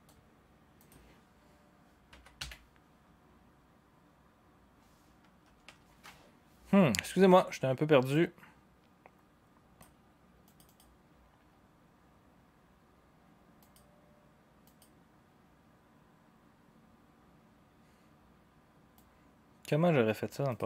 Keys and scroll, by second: 2.1-2.4 typing, 5.4 BackSpace, 5.6 BackSpace.